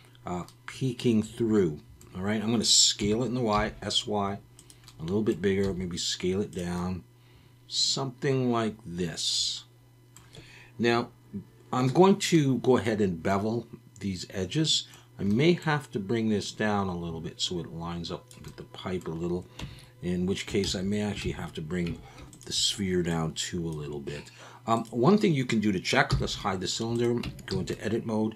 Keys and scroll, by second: 3.0 s, 3.5 y, 5.6 s, 19.6 Tab, 20.7 ctrl+z, 21.2 ctrl+z, 21.9 Tab, 26.1 h, 27.2 Tab, 27.5 a.